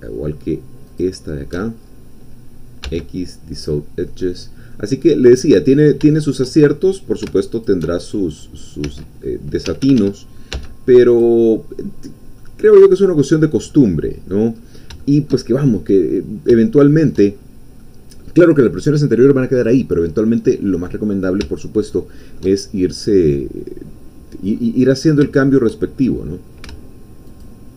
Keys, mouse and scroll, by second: 0.9 alt+shift+click, 1.8-2.8 alt+shift+scroll down 1, 2.8 x, 3.5 click, 4.2 middle click, 5.0-5.4 scroll up 1, 5.4 middle click, 6.1 shift+middle click, 6.6 shift+scroll up 2, 7.5 alt+shift+click, 8.0 alt+shift+scroll down 2, 8.8 s, 9.6 Escape, 10.5 x, 11.1 click, 11.9-12.4 scroll down 2, 12.4 middle click, 13.2-13.7 scroll up 2, 13.7 middle click, 14.6 scroll up 2, 15.0 shift+middle click, 15.9-17.3 middle drag, 17.3-17.6 shift+scroll down 2, 17.8 middle click, 21.9 shift+middle click, 22.7 shift+scroll down 2, 23.1-24.8 middle drag, 24.8-25.2 scroll up 1, 25.3 shift+middle click, 27.3 alt+shift+click.